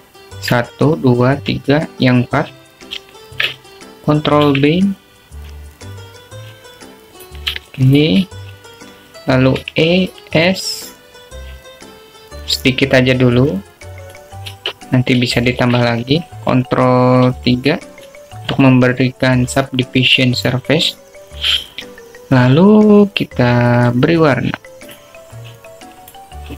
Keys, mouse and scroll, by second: 1.0 click, 5.3 alt+shift+click, 6.4 ctrl+b, 9.9 shift+click, 11.7 e, 16.7 Tab, 17.5 shift+click, 19.2 ctrl+3, 25.9 click.